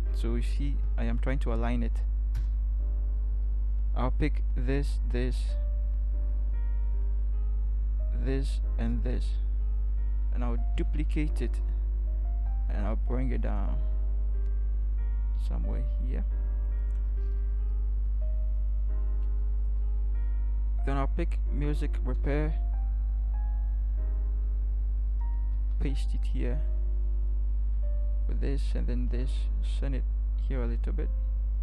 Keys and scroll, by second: 0.7 shift+Left, 2.4 Return, 10.7 ctrl+j, 22.1 ctrl+c, 25.5 ctrl+v, 30.0 ctrl+shift+Right.